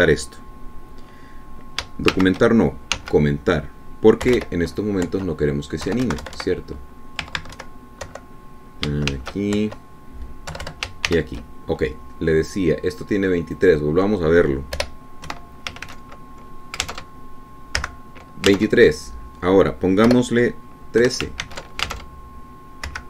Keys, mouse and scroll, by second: 0.6 click, 3.5 shift+,, 4.3 1, 5.6 -, 6.4 End, 7.2 Home, 7.4 Right, 8.6 Left, 8.9 Right, 9.4 Delete, 10.4 shift+1, 10.9 shift+End, 11.9 KP_Subtract, 12.4 shift+., 14.9 click, 16.1 BackSpace, 16.6 KP_2, 18.3 alt+Tab, 19.1 F5, 19.9 alt+Tab, 21.4 BackSpace, 22.4 KP_1, 22.8 ctrl+s.